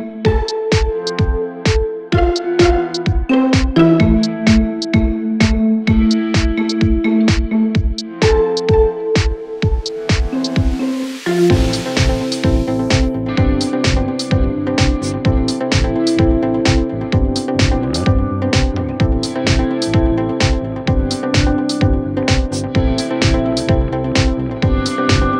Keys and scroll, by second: 15.8 shift+Page_Down, 18.2 w, 19.9 d.